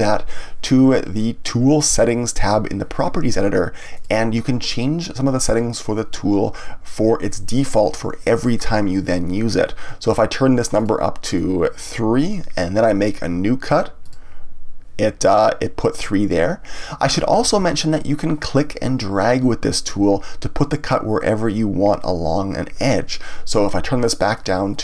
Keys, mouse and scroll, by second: 3.9 click, 10.7 click, 14.0 click, 17.4 ctrl+z, 24.3 click.